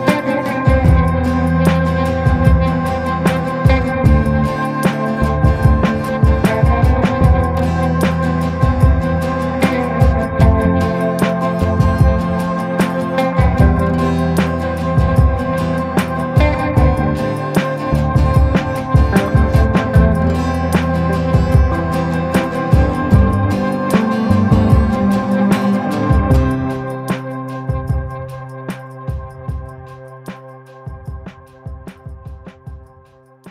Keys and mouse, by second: 0.2 ctrl+z, 1.1 middle click, 1.6 shift+middle click, 3.5 ctrl+i, 4.0 b, 4.8 b, 5.4 b, 6.0 b, 6.9 middle click, 7.4 b, 8.1 b, 9.0 middle click, 11.9-12.9 drag, 13.4-14.2 ], 14.3-16.2 drag, 16.4-17.6 drag, 18.3-19.4 drag, 19.4-20.0 [, 20.0-24.5 drag, 25.9 click, 26.2 click, 26.6 click, 27.4 click, 27.9 click, 28.5 click, 29.0 click, 29.5 click, 30.0 click, 30.5 click, 31.0 click, 31.4 click, 31.9 click, 32.2 [, 32.5 [, 32.8 click, 32.8 [, 33.4 click.